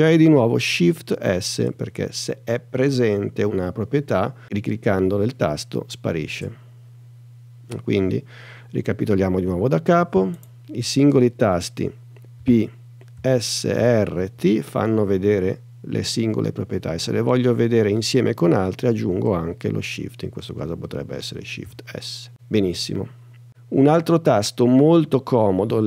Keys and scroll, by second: 1.6 shift+s, 12.4 p, 13.2 s, 13.8 r, 14.4 t, 21.6 shift+s.